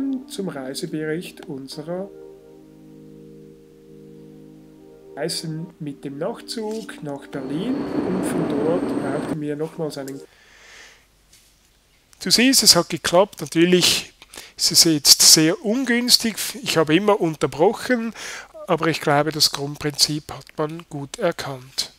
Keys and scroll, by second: 10.1 Escape.